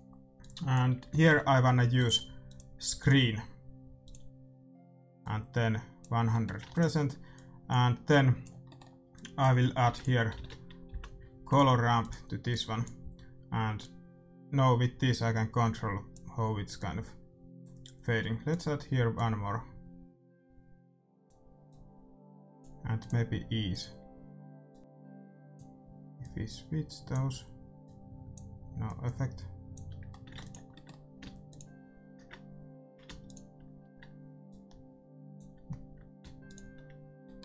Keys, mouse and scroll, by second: 1.0-4.9 middle drag, 5.1-7.1 drag, 6.3-8.0 middle drag, 6.6 ctrl+s, 7.3-10.9 drag, 8.6-10.7 middle drag, 9.8 shift+a, 12.0-15.7 drag, 16.7-20.8 drag, 21.6-24.8 drag, 26.2-30.5 drag, 30.3 ctrl+s, 30.8-32.5 middle drag, 31.4-36.2 drag, 37.2-37.4 drag, 37.2-37.4 middle drag.